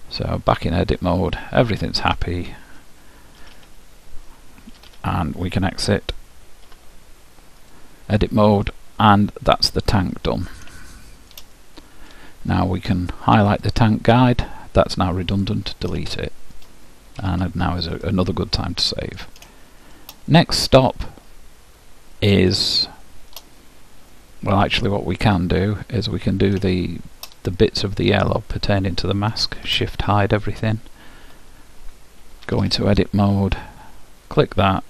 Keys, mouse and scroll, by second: 1.1-2.8 middle drag, 3.4 a, 4.9 Tab, 6.7 alt+h, 8.8-13.6 middle drag, 13.6-15.4 drag, 14.9 Delete, 16.2-18.0 middle drag, 17.3 ctrl+w, 18.7-22.3 middle drag, 22.8-25.6 middle drag, 26.8-30.0 middle drag, 28.4-30.4 drag, 29.6 shift+h, 31.2 KP_Decimal, 32.6 Tab, 34.4-34.8 drag.